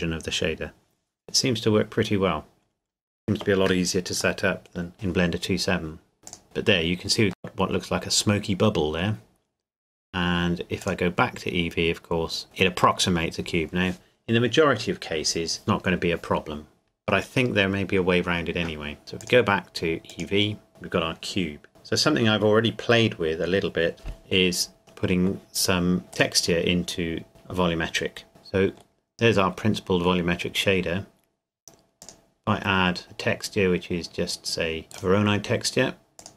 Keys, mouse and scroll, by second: 2.1 scroll up 1, 5.2 scroll up 1, 6.4 click, 7.4 middle click, 10.9 click, 19.2 click, 21.1-22.8 scroll down 1, 24.8 click, 28.3 middle click, 29.0-29.8 scroll up 1, 29.8 middle click, 32.0 click, 34.9 click.